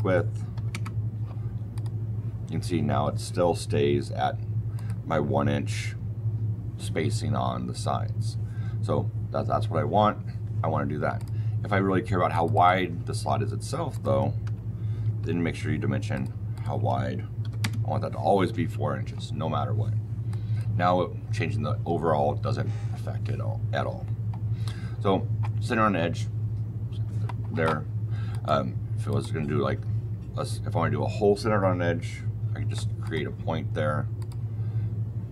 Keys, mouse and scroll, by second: 0.4 KP_7, 0.6 KP_Enter, 1.6 click, 4.7 click, 11.1 click, 12.2 click, 12.4 click, 13.8 click, 14.3 Delete, 15.0 d, 16.0 click, 16.4 click, 17.3 KP_4, 17.5 KP_Enter, 20.2 click, 28.2 click, 29.0 click, 32.9 click, 34.1 click.